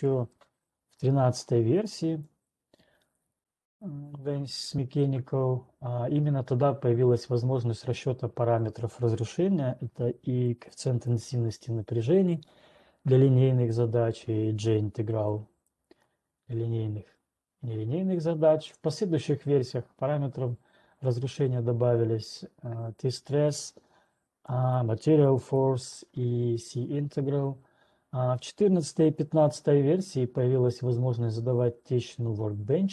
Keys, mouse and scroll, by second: 0.3-0.8 scroll, 0.8 ctrl+2, 0.8-1.3 scroll, 2.3 scroll, 5.8-6.3 scroll, 11.8 click, 15.8 click, 24.9 click, 25.9 click.